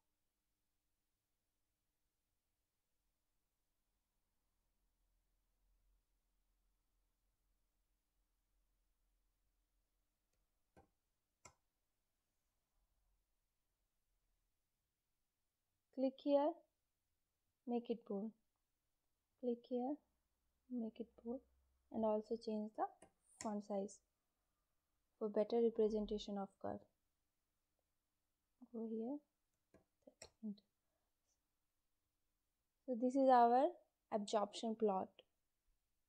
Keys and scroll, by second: 10.2 3, 10.6 0, 11.4 Return, 22.6 3, 22.9 0, 23.3 Return, 29.2-30.1 typing.